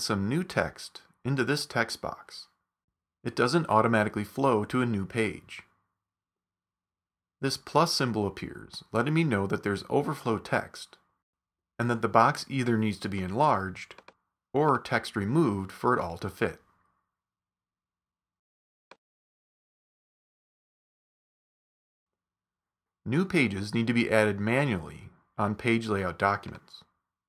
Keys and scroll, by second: 20.5 super+z, 22.8 super+z.